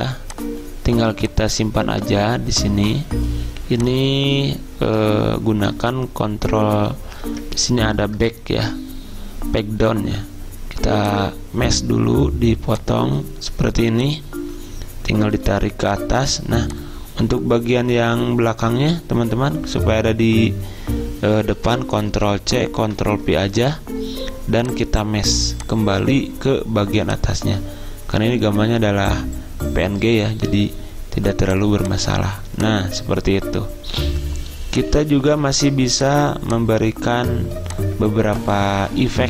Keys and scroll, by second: 5.8 ctrl+Page_Down, 6.3 ctrl+Page_Down, 7.4 ctrl+Page_Up, 22.2 ctrl+c, 22.9 ctrl+v, 35.5 ctrl+z, 37.2 ctrl+z.